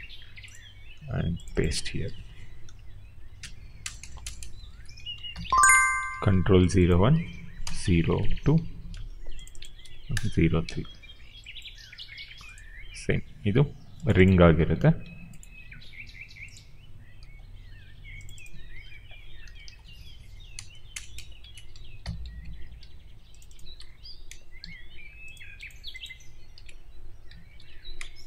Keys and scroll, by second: 1.9 ctrl+v, 2.9 Left, 3.7-5.7 typing, 6.0 ctrl+c, 7.1 ctrl+v, 7.6 BackSpace, 8.8 2, 8.9 Return, 9.7 ctrl+v, 10.1 Return, 14.4 ctrl+c, 18.6 ctrl+v, 19.6 Left, 20.4-22.4 typing, 22.9 ctrl+c, 23.7 ctrl+v, 24.2 BackSpace, 24.5 2, 26.4 ctrl+b, 27.4 ctrl+v, 27.9 BackSpace.